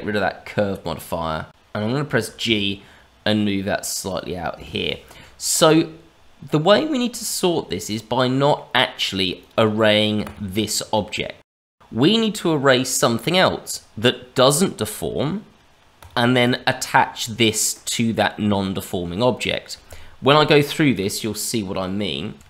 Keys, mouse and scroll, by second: 0.8 middle click, 1.5 click, 2.0 g, 4.6 shift+middle click, 7.9 middle click, 9.3 click, 10.2 click, 10.9 middle click, 15.9 click, 16.4 click, 22.3 n.